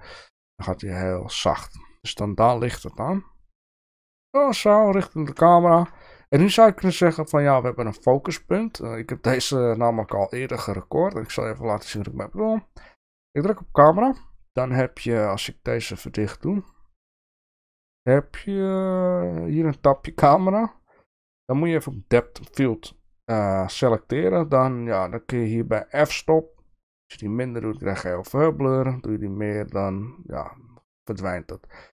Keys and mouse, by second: 4.4 click, 5.6 shift+middle click, 9.7 shift+middle drag, 11.8 click, 16.2 click, 17.2 click, 20.2 click, 22.1 click, 26.5-31.9 drag.